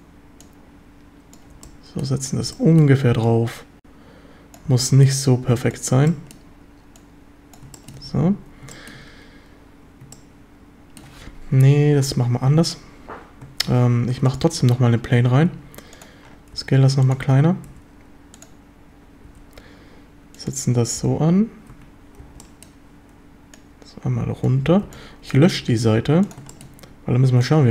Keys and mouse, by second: 0.5 click, 2.5 b, 3.4-4.5 drag, 4.7 b, 6.0 b, 7.0 click, 7.7 shift+middle click, 8.0 a, 8.7 shift+middle click, 10.1-11.0 shift+middle drag, 12.1 Tab, 12.5 x, 13.7 shift+a, 15.2 Tab, 15.5 s, 16.0 click, 16.5 s, 17.1 click, 17.7 s, 18.4 click, 19.3 g, 20.3 click, 21.0 b, 22.2 b, 23.6 click, 24.6 a, 24.8 b, 25.6 x, 26.5 shift+drag.